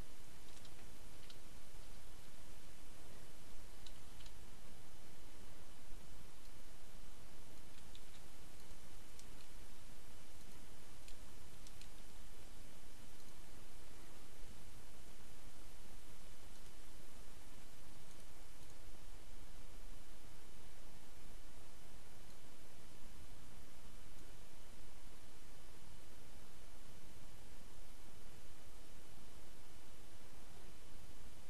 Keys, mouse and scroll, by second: 0.0-0.9 typing, 2.4 0, 3.6-4.4 typing, 6.5-7.7 drag, 7.8 ctrl+c, 8.6 ctrl+click, 9.2 space, 9.6 ctrl+v, 10.5 click, 10.8 ctrl+space, 11.9 ctrl+v, 13.2 click, 16.0-17.0 drag, 18.2 right click, 18.7 click, 22.2-24.5 drag.